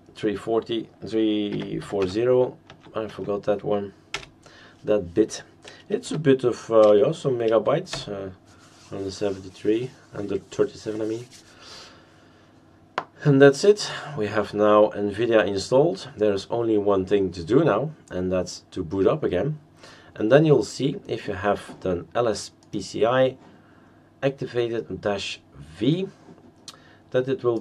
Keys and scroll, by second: 1.3-2.5 typing, 2.7 Tab, 3.1 Tab, 4.3 Return, 6.0 y, 7.9 Return.